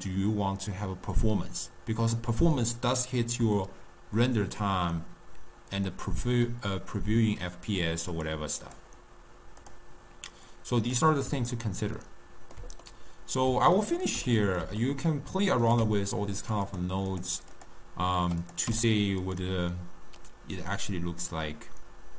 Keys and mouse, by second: 6.0-9.9 drag, 10.6-12.1 drag, 12.1-16.8 ctrl+middle drag, 16.8-17.8 drag, 18.6 click, 18.8 u.